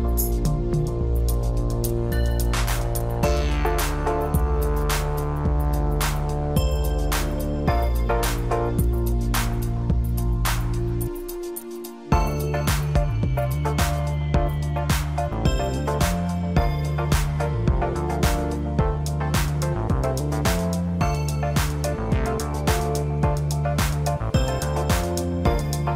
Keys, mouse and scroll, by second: 0.1 ctrl+r, 4.1-5.4 scroll up 2, 5.4-5.8 scroll down 3, 5.8-6.4 scroll up 2, 6.4 s, 9.3 click, 10.0 click, 10.7 shift+click, 11.7 i, 14.2 s, 16.9-17.2 scroll up 1, 17.2 scroll down 2, 17.5-19.0 middle drag, 19.0 e, 20.3-21.0 scroll down 1, 21.0 Tab, 21.5-22.6 middle drag, 22.6-23.0 scroll down 2, 23.0-24.5 middle drag, 24.5-25.0 scroll up 1, 25.0 click, 25.7-25.9 scroll up 1.